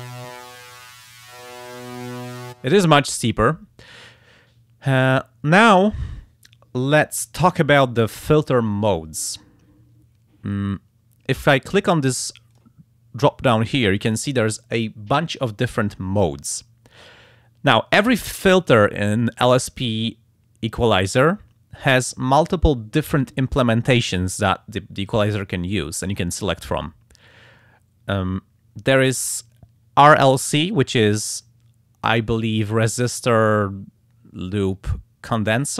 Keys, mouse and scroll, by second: 0.1-2.4 drag, 12.5 click.